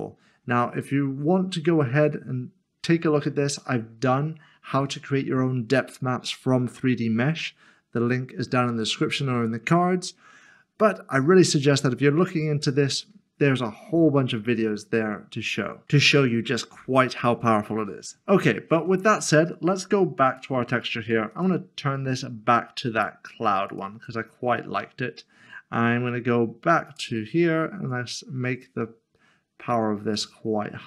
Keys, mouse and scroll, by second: 20.3 click, 23.7 click, 26.9 click.